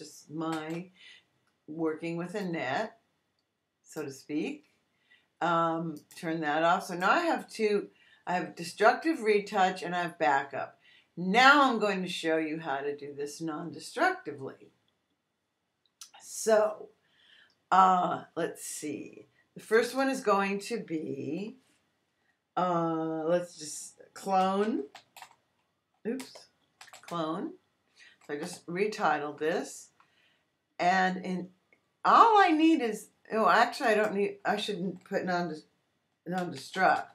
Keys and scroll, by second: 0.5 super+j, 24.1-27.4 typing, 28.4 Return, 36.1-37.1 typing.